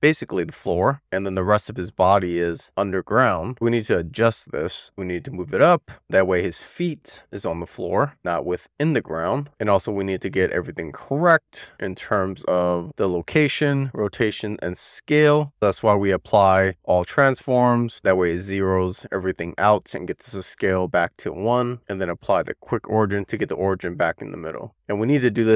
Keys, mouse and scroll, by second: 2.4 click, 11.4-11.9 scroll down 1, 11.9-12.6 scroll up 1, 12.7 click, 15.1 click, 16.0 ctrl+a, 21.7 alt+q.